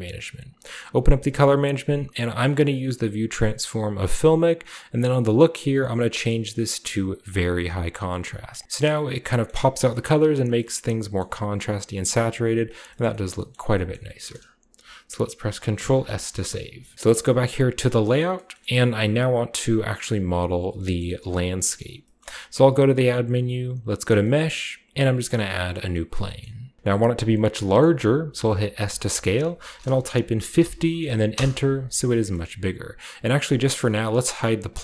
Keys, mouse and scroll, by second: 0.1 click, 0.5 click, 0.8 click, 2.5 scroll down 1, 3.5 click, 4.0 click, 5.1 click, 6.5 click, 7.2 click, 8.6-9.1 shift+scroll down 2, 8.7 shift+middle click, 14.2-15.7 shift+middle drag, 14.2-16.6 shift+scroll up 2, 15.7 ctrl+s, 16.3-17.5 shift+middle drag, 17.6 click, 18.3-20.0 shift+middle drag, 18.5-19.5 scroll down 1, 19.8 click, 20.8-23.7 shift+middle drag, 22.5 a, 25.2 click, 25.9-26.4 shift+middle drag, 26.4 scroll up 1, 26.8 ctrl+b, 27.2 scroll down 1, 27.8-29.4 middle drag, 27.8-29.4 scroll down 1, 28.8 s, 30.3-31.1 typing, 31.3 Return, 31.9 scroll down 1, 32.0-33.6 middle drag, 34.6 click.